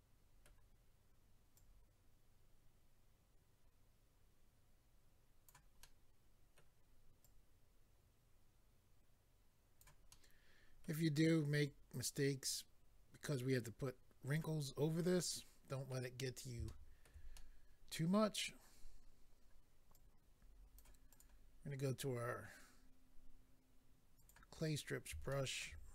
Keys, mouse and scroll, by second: 1.5 click, 5.8 middle click, 7.2 click, 10.1 middle click, 11.6 click, 14.8-15.2 scroll down 2, 15.2 middle click, 16.2 scroll up 1, 17.3 middle click, 18.2-18.5 scroll up 1, 19.9 click, 21.1 click, 21.2 click, 24.1 click, 24.3 click, 24.6-25.3 scroll up 1, 25.3 shift+middle click.